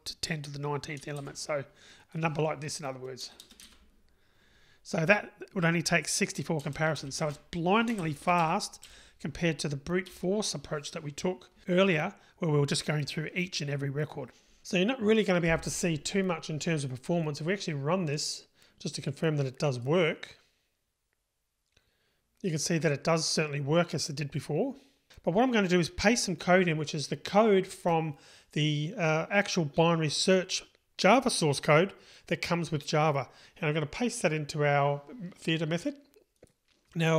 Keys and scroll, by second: 3.8 super+v, 8.5 Delete, 10.0 Delete, 19.8 ctrl+shift+r.